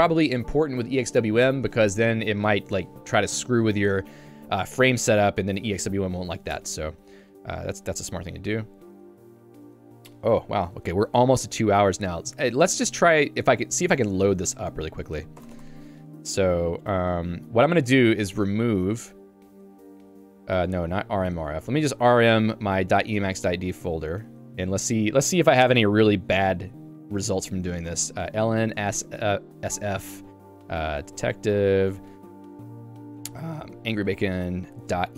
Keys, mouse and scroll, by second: 4.8 Escape, 6.6 Escape, 8.9 j, 9.2 ctrl+d, 10.8 k, 17.4-18.7 typing, 20.3 BackSpace, 20.8 BackSpace, 21.4 Escape, 21.9 a, 22.4 ~, 22.7 /, 23.2 Tab, 23.8 Return, 28.3 n, 31.0 d, 31.4 Tab, 33.8-35.1 typing.